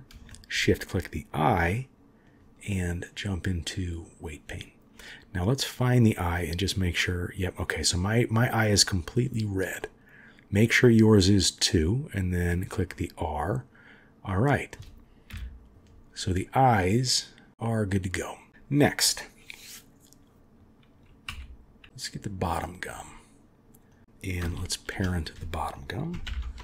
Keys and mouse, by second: 0.3 shift+click, 3.1-4.0 drag, 9.0 click, 9.8-11.3 middle drag, 12.1 click, 12.9-14.7 middle drag, 15.3 KP_3, 21.3 KP_1, 22.5-22.9 drag, 23.9 click, 24.7 shift+click, 26.2 ctrl+p.